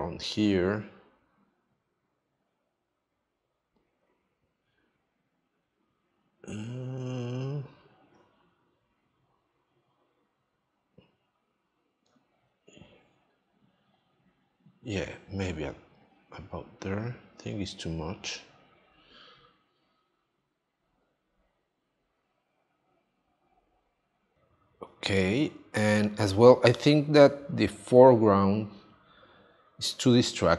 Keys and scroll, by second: 24.3 space.